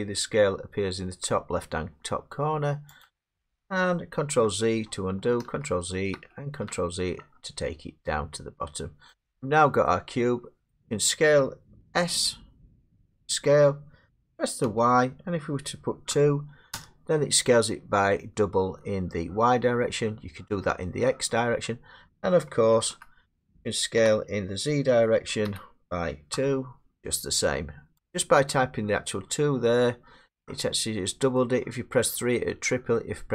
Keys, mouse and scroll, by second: 1.2 click, 2.0 click, 3.0 click, 4.5 ctrl+z, 5.5 ctrl+z, 6.1 ctrl+z, 7.2 middle click, 7.3 middle click, 9.1 scroll, 9.1 middle click, 9.4 middle click, 9.5 middle click, 10.7 middle click, 11.8 s, 14.7 y, 16.1 2, 22.9 ctrl+z, 24.0 s, 25.5 z, 26.3 z, 27.2 scroll, 28.1 click, 31.4 middle click.